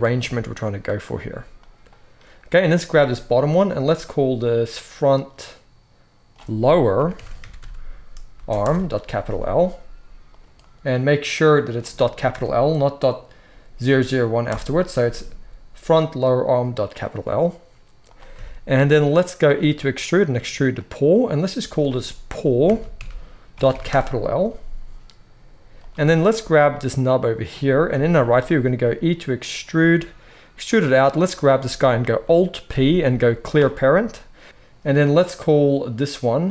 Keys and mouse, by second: 0.0 click, 0.1-4.3 middle drag, 0.1 g, 1.1 g, 4.3-18.0 drag, 18.0-21.0 shift+middle drag, 19.4 e, 21.0 click, 21.1 middle click, 21.6-25.8 drag, 25.8-31.1 shift+middle drag, 27.8 KP_3, 29.7 e, 31.1-32.1 drag, 32.1-36.5 alt+middle drag, 32.6 alt+p, 34.4 alt+p, 34.4 g.